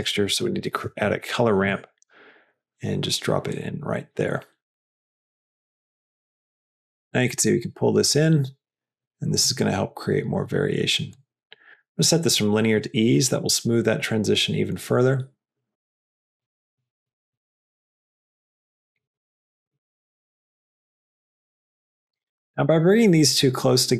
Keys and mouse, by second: 4.8-9.6 drag, 11.0 click, 11.9-13.0 drag, 15.7-19.2 drag, 19.6-22.0 drag.